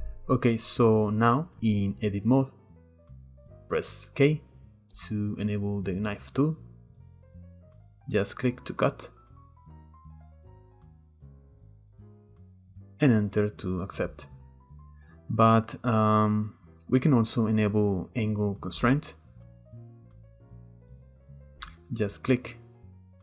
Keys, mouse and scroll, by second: 0.9-2.4 drag, 2.4-4.2 shift+middle drag, 4.2 k, 15.3 ctrl+z, 20.5 k.